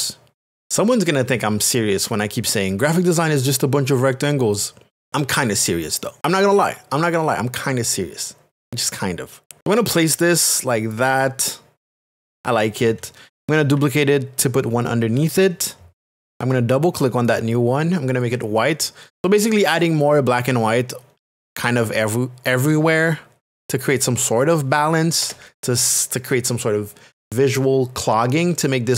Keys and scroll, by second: 25.2 Return.